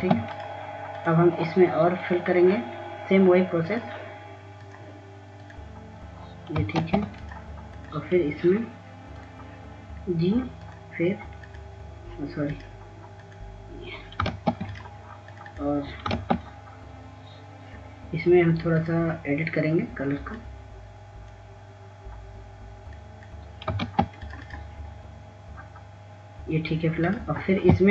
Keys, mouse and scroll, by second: 0.9 click, 1.9 ctrl+space, 2.3 click, 8.7 ctrl+space, 9.2 click, 16.4 ctrl+space, 16.7 click, 20.8 click, 25.9 ctrl+space, 26.3 click, 27.0-27.9 scroll up 1.